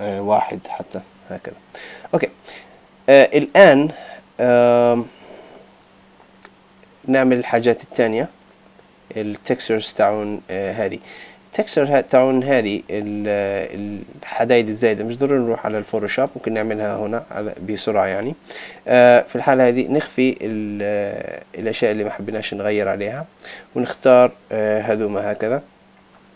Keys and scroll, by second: 0.4 Return, 20.3 ctrl+BackSpace.